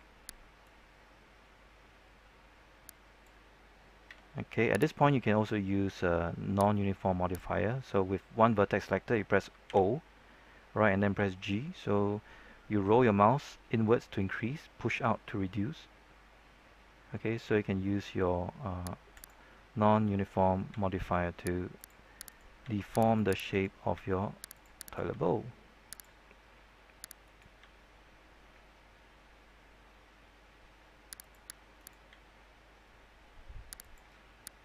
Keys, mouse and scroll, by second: 4.0 typing, 4.9 right click, 6.6-8.2 drag, 9.6 typing, 12.2-13.7 scroll up 1, 15.2-16.0 scroll down 1, 16.0 scroll up 1, 16.1-18.2 scroll down 1, 18.2 scroll up 1, 18.5-19.1 scroll down 1, 19.1 click, 20.6 g, 21.7 click, 22.2 right click, 22.6 g, 23.1 click, 23.4-24.5 right drag, 23.9 g, 24.5 click, 24.8 right click, 25.0 g, 25.9 click, 26.1-26.5 scroll down 1, 26.5-27.2 scroll up 1, 27.2 right click, 27.5 g, 28.6 scroll up 1, 28.8-31.1 scroll down 1, 31.1 click, 31.7 right click, 33.7 click.